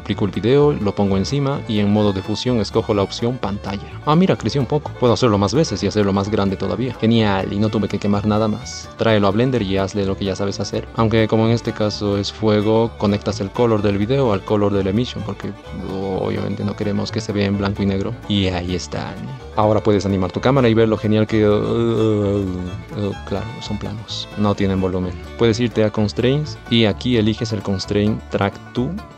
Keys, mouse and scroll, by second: 8.9 shift+a, 9.6 ctrl+0, 9.8 click, 10.6 shift+click, 12.5 space, 18.4 space.